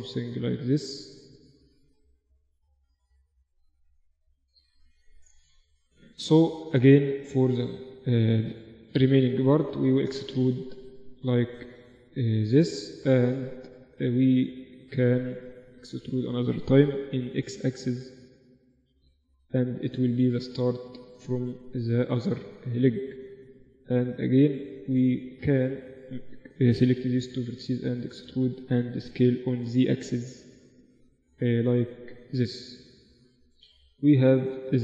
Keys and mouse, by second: 1.4-4.6 drag, 2.2-3.5 middle drag, 2.2-4.0 right drag, 4.6-6.8 middle drag, 6.8-8.9 drag, 6.8-9.3 right drag, 8.9 e, 9.3-10.8 middle drag, 11.2-13.8 drag, 12.0-13.0 right drag, 13.8-18.2 middle drag, 17.2 e, 18.2 right click, 20.1 middle click, 20.9-22.9 right drag, 21.6-23.4 drag, 23.4-26.2 middle drag, 26.2-28.0 right drag, 27.0 e, 29.2 s, 32.8-34.4 drag, 34.4 middle click, 34.7-34.8 right drag.